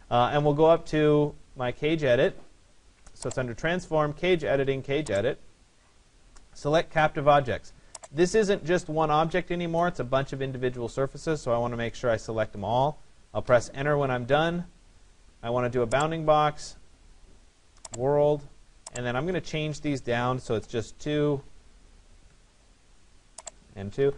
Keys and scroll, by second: 13.0 Return, 22.3 Return.